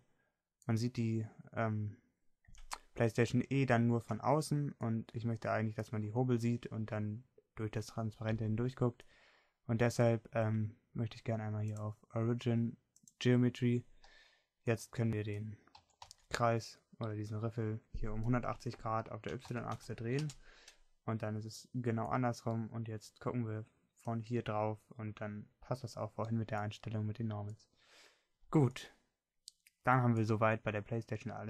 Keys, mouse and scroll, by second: 0.1-1.4 middle drag, 4.6-6.2 middle drag, 7.6-10.2 middle drag, 17.1 r, 22.5 middle click, 23.9 middle click, 24.6-30.0 middle drag.